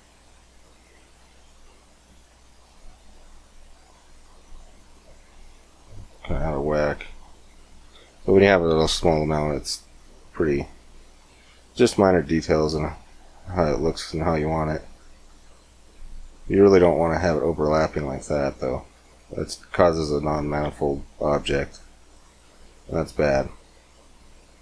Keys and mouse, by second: 0.7 middle click, 1.0-2.8 drag, 2.8 middle click, 4.3-6.3 middle drag, 6.3-10.4 drag, 10.4-13.5 middle drag, 14.3-18.1 drag, 18.1 middle click, 18.4-21.0 drag, 21.9 middle click, 22.0-24.6 drag.